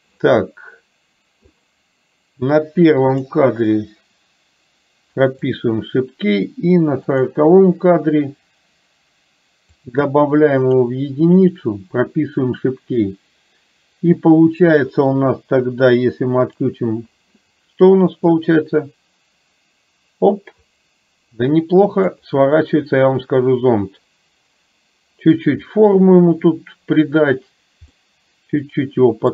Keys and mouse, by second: 3.1 click, 5.4 click, 7.1 click, 10.0 click, 11.5 click, 16.5 click, 18.5-22.2 drag, 22.6-25.5 middle drag, 28.0-29.3 middle drag.